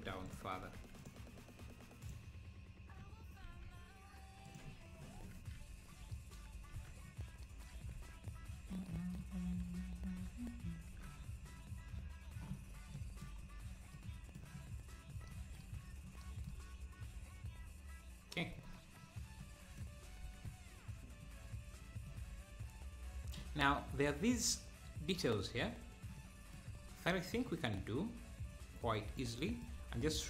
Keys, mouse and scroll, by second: 0.1 Tab, 0.3 click, 0.7 Tab, 1.0 click, 2.1-3.5 drag, 3.5 e, 5.2 Tab, 6.8 ctrl+s, 7.1-7.4 scroll down 1, 8.0 ctrl+s, 8.5-8.9 scroll down 1, 10.3 KP_0, 10.9 KP_0, 11.7 scroll down 1, 12.6-12.9 scroll down 4, 12.9 middle click, 13.5-13.9 scroll down 1, 13.9 middle click, 14.9-15.3 scroll up 1, 15.8 `, 17.6-18.1 scroll up 1, 18.1-18.6 scroll down 1, 18.6 ctrl+s, 19.0-19.5 scroll up 5, 19.5 middle click, 20.3 ctrl+s, 21.5-22.1 scroll up 2, 22.1-23.6 middle drag, 23.6-23.9 scroll up 2, 24.0-30.0 middle drag, 30.0-30.2 scroll down 2.